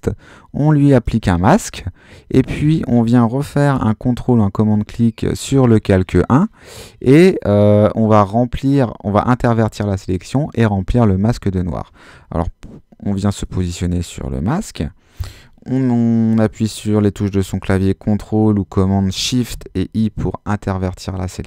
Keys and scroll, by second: 19.5 shift+super+i, 21.0 g.